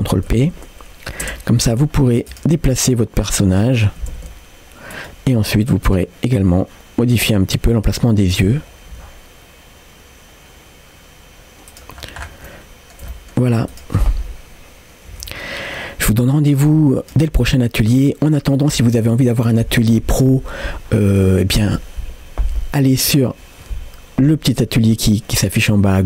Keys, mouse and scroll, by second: 0.3 ctrl+p, 2.0-2.3 scroll down 1, 2.3 click, 2.7 g, 3.6-4.0 scroll down 1, 4.0 r, 5.4 scroll up 1, 5.9 click, 6.4 g, 8.1 scroll up 1, 8.1 middle click, 8.6 scroll up 1, 8.9 g, 12.0-12.5 scroll down 2, 12.5 middle click, 13.1 shift+middle click, 13.7 click.